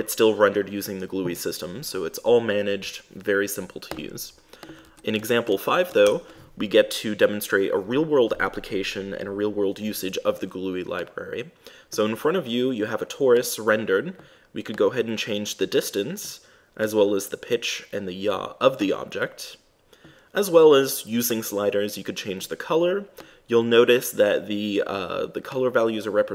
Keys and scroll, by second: 5.2 super+`, 6.3 super+Return.